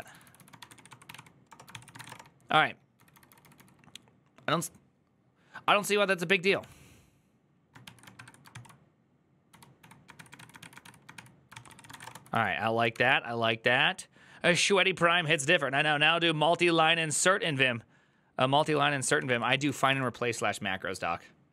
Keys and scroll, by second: 0.0-3.2 typing, 8.3 ctrl+c, 8.3-12.6 typing, 12.7 alt++, 18.5 alt+{, 19.0 ctrl+c, 19.1 ctrl+c, 19.2-20.1 typing.